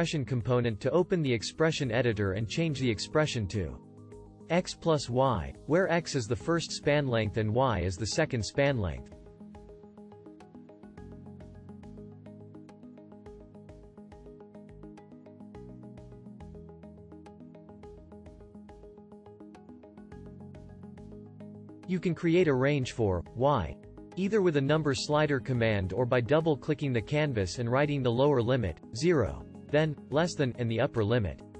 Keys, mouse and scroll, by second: 30.5 <.